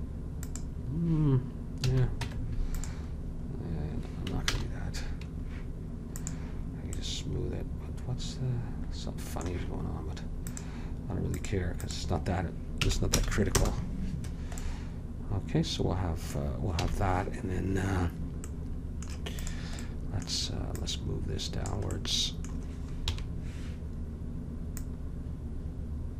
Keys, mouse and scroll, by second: 1.9 a, 2.3 Tab, 4.6 ctrl+z, 6.2-7.2 drag, 7.2-8.2 middle drag, 10.6-13.8 drag, 16.8 a, 19.5-22.6 drag, 22.6 middle click, 23.2 KP_3, 23.3 middle click, 24.9 click.